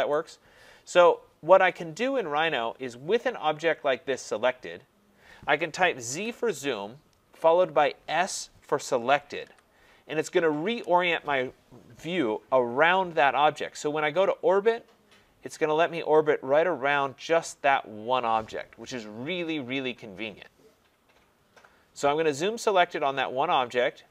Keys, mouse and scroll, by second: 0.1 right click, 2.7-3.7 scroll down 1, 3.7 scroll up 2, 4.3-5.1 scroll up 1, 6.1-6.4 typing, 9.2-10.0 typing, 10.6 Return, 12.0 scroll.